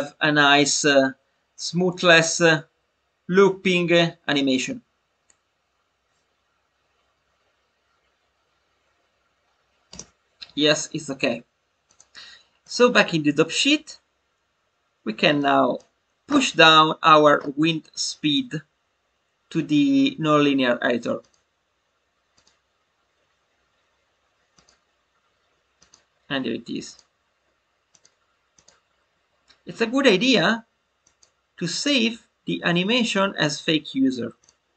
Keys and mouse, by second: 9.8 space, 11.8 click, 12.6-13.8 drag, 15.3 click, 18.3 click, 21.1-22.4 drag, 24.4 click, 25.9-27.0 drag, 27.9 click, 31.0 click, 34.3 click.